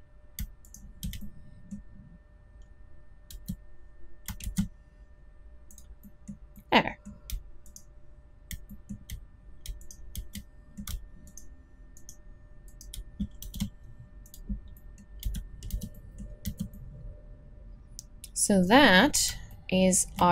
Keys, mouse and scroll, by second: 3.3 s, 10.6 middle click, 13.4 shift+e, 15.2 z, 15.7 z, 16.4 a.